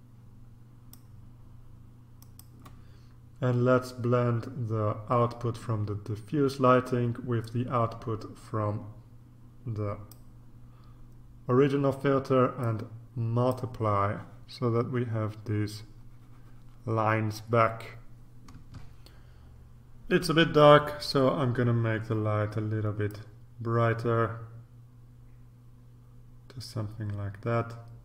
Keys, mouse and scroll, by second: 2.2 click, 7.4-10.7 drag, 12.6 click, 18.7 ctrl+r, 23.1-28.0 drag.